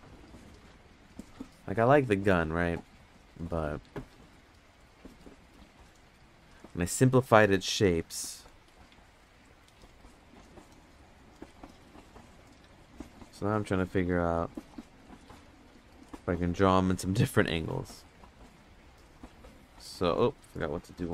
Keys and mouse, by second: 0.6 click, 10.3 middle click, 11.2 middle click, 20.8-21.1 drag.